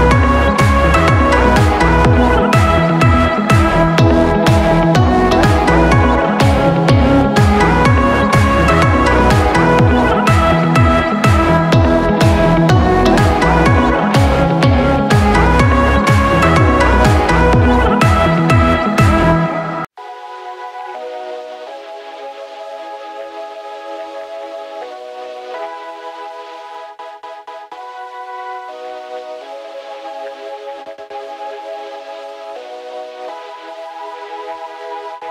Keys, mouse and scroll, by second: 26.0 right click, 31.2 ctrl+t.